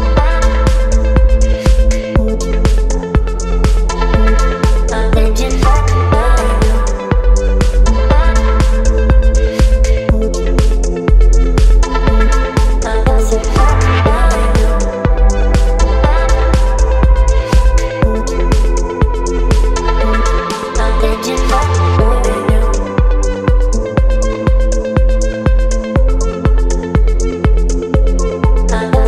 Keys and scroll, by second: 20.8 KP_3, 21.0 KP_2, 23.8 space, 25.5 space, 27.5 ctrl+t.